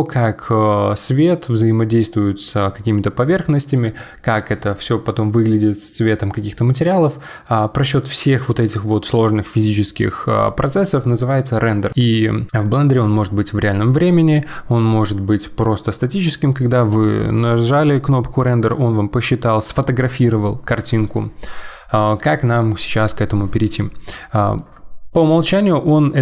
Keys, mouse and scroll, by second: 24.1-26.2 middle drag.